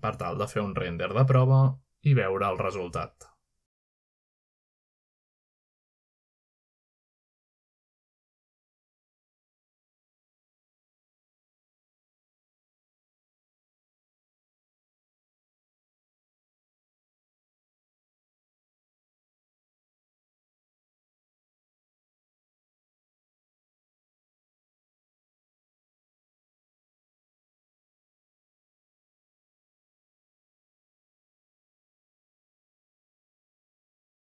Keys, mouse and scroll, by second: 1.4-2.2 drag, 2.5 middle click, 2.6 g, 3.3 click, 4.7-5.8 drag, 5.8 click, 6.7-9.5 typing, 10.7-12.2 typing, 14.2 click, 14.2 typing, 16.0 click, 17.1-24.4 typing, 26.3-27.0 drag, 26.6 typing, 27.1-28.1 drag, 28.2 click, 29.2 click, 30.0-31.0 typing, 32.4 Return, 33.4-34.2 typing, 33.6-34.2 middle drag.